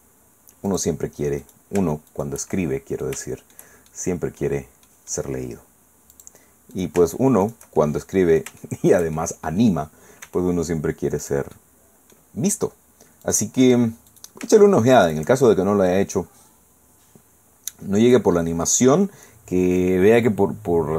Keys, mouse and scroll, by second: 0.7 click, 1.4 click, 2.1 shift+middle click, 2.5-3.7 shift+middle drag, 3.9 shift+middle click, 4.9 middle click, 6.1 click, 6.7 shift+right click, 7.4 shift+right click, 7.8-9.9 shift+middle drag, 10.2 e, 11.2 click, 12.2 middle click, 13.2 click, 14.1 right click, 15.1 shift+right click, 15.4 shift+click, 18.1-20.9 drag.